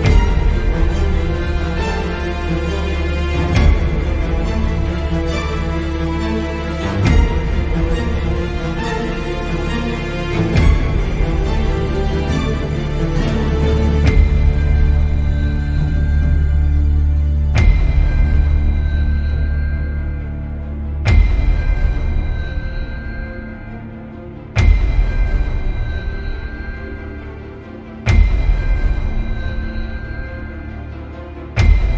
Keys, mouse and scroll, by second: 0.5 ctrl+z, 1.5 shift+middle click, 2.6 shift+middle click, 3.8 click, 6.5 ctrl+z, 7.4 shift+click, 10.8 click, 11.8 drag, 12.9 g, 14.1-16.0 drag, 16.2 g, 23.4 ctrl+z, 26.0 click, 26.7 click, 31.1 g.